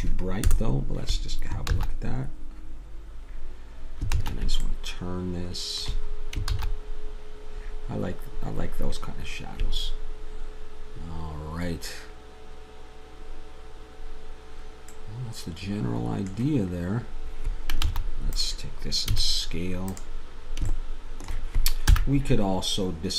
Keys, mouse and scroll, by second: 0.5 KP_0, 1.8 shift+z, 4.2 shift+z, 4.6-5.6 middle drag, 6.5 shift+z, 15.3 middle click, 17.9 shift+z, 18.3-20.7 drag, 19.2 s, 21.9 n.